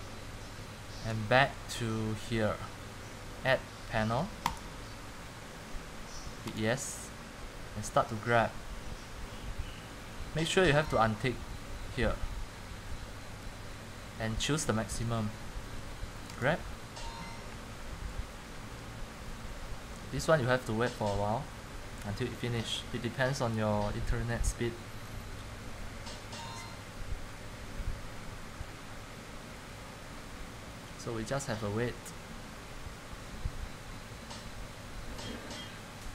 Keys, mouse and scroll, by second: 15.0 click.